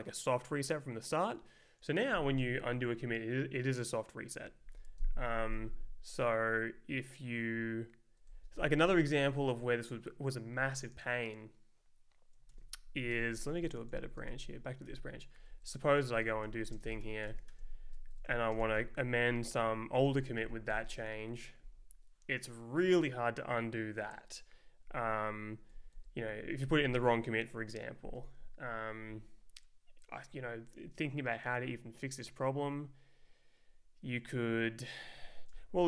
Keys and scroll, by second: 8.3 Right, 12.5 ctrl+s, 13.1 ctrl+t, 13.9 Left, 14.0 Down, 14.2 space, 14.9 ctrl+s, 15.3 Up, 15.9 Down, 16.0 super+Right, 16.2-18.5 typing, 18.1 Up, 18.2 Left, 18.8 Right, 19.0 Down, 19.4 Right, 19.5 Down, 20.4 shift+a, 20.7 Return, 25.7 Down, 25.9 Up, 35.5 Return.